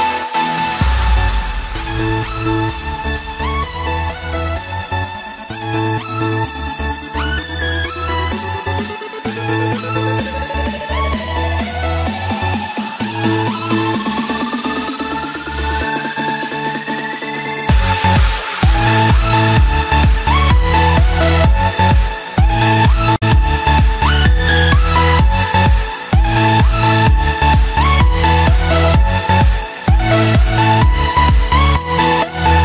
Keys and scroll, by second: 27.0 alt+BackSpace, 28.6 ctrl+z, 29.7 ctrl+BackSpace.